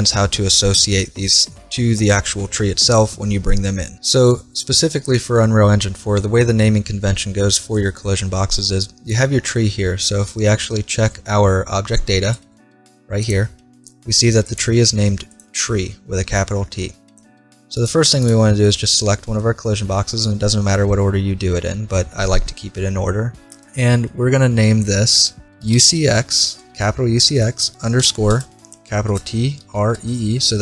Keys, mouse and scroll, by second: 9.3 scroll down 1, 13.3-16.3 drag, 18.2-20.2 right drag, 20.2-22.2 middle drag, 24.6 middle click, 25.4 click, 30.1 e.